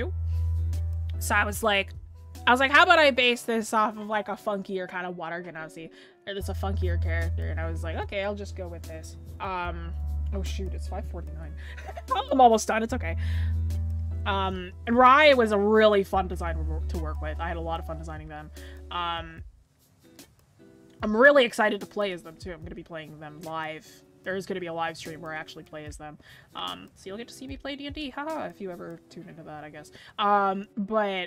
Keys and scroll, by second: 6.1-6.7 scroll up 1.